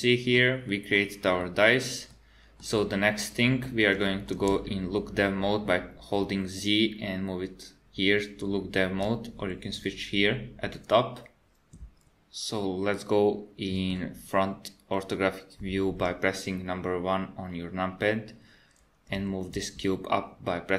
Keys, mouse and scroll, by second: 13.0 middle click, 14.2 KP_1, 19.2 g.